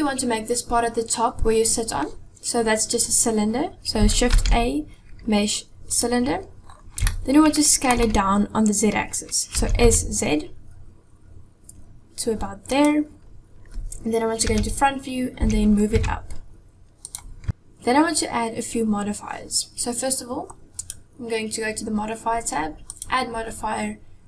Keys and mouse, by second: 4.3 shift+a, 7.1-7.9 shift+middle drag, 9.6 s, 14.5 KP_1, 15.4 g, 22.9-24.2 drag.